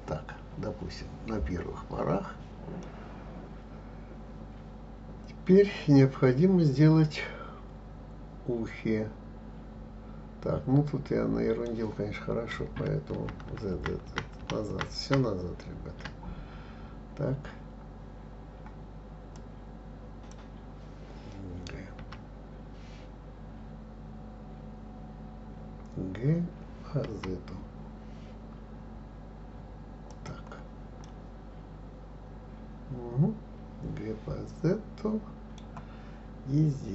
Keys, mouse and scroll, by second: 2.8-5.9 middle drag, 13.1 ctrl+z, 13.5 ctrl+z, 13.7 ctrl+z, 14.0 ctrl+z, 14.3 ctrl+z, 14.7 ctrl+z, 15.0 ctrl+z, 19.3 click, 22.0 g, 31.0-34.1 middle drag.